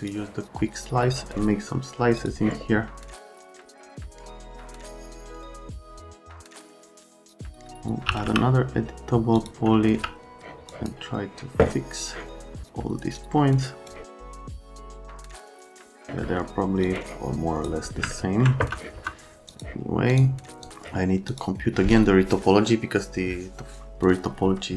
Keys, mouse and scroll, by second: 0.0 click, 2.2 click, 3.1 click, 3.5 click, 3.7 middle click, 3.8 click, 4.2 click, 4.5 click, 4.7 click, 4.9 click, 5.1 click, 5.3 right click, 5.5 click, 5.8 click, 6.0 alt+right click, 6.4 F3, 6.5 F3, 7.4 click, 7.8-8.7 typing, 9.3 click, 10.0 `, 10.7 click, 13.1 click, 14.1 middle click, 14.3 middle click, 14.5 middle click, 14.8 middle click, 15.0 middle click, 15.3 alt+middle click, 15.6 click, 15.7 middle click, 16.0 click, 16.2 middle click, 16.8 click, 16.9 middle click, 18.1 alt+right click, 18.6 F3, 18.9 F3, 19.5 click, 20.1 click, 20.6 click, 21.3 click.